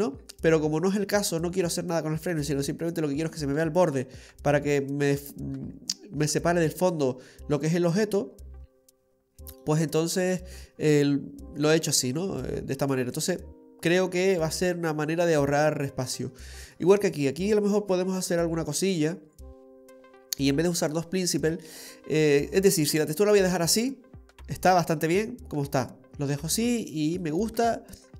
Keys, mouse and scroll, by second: 4.9-8.2 scroll down 5, 5.6 middle click, 13.1 click, 16.0 scroll down 4, 16.3 middle click, 23.4-24.7 scroll up 3, 23.8 middle click, 24.7 scroll up 1, 24.9-26.4 scroll down 3, 26.5-26.9 scroll down 3, 26.9 middle click.